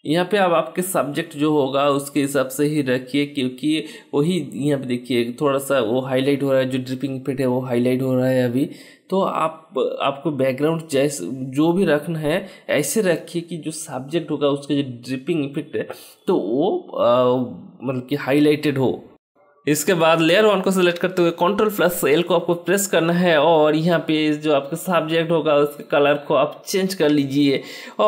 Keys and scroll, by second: 20.5 ctrl+l.